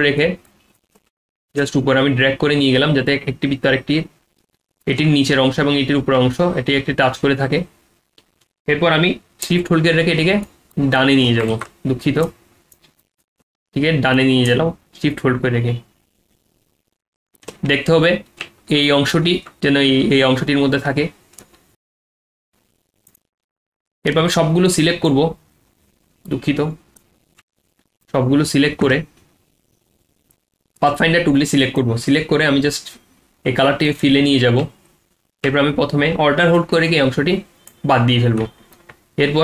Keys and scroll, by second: 11.5 ctrl+z.